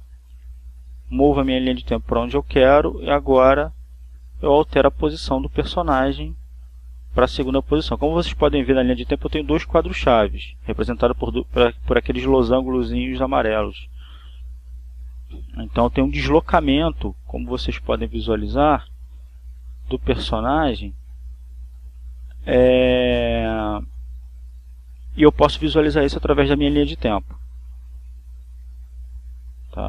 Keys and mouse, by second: 0.7 click, 2.9 Right, 10.5 Right, 13.4 Right, 18.1 click, 19.6 click, 20.5 Left, 23.3 click, 25.5 click.